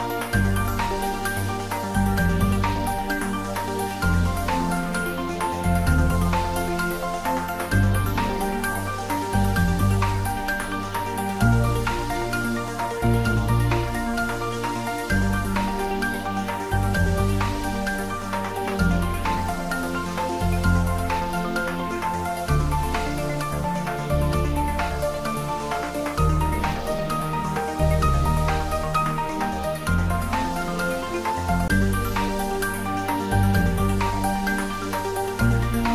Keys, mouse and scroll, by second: 0.1 click, 1.8 `, 2.1 3, 4.1-5.7 scroll up 1, 5.7 g, 6.3 x, 8.9 x, 9.0 click, 10.5 g, 14.3 click, 14.6-15.6 typing, 18.4 click, 19.2 f, 19.7 y, 20.8 BackSpace, 22.3 g, 22.7 y, 23.6 x, 24.5 BackSpace, 27.8 click, 28.4-29.3 scroll down 1, 29.3-31.8 middle drag, 31.8 click, 34.5 click.